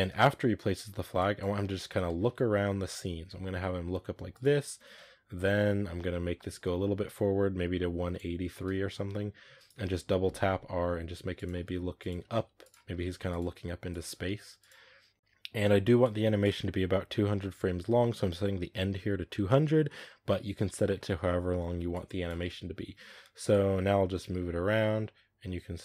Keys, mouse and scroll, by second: 0.0 space, 1.0-1.8 drag, 1.8 space, 2.1 r, 4.9 space, 6.2 space, 6.4-8.8 drag, 8.8 r, 9.6 r, 11.5-13.9 typing, 15.1 click, 15.1 space, 15.9-25.8 drag.